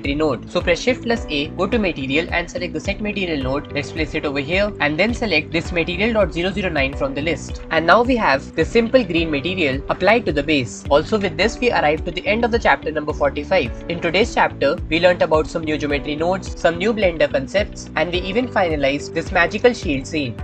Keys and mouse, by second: 1.3 shift+a, 3.7 click, 5.5 ctrl+z, 5.5-7.6 drag, 8.0-20.4 middle drag.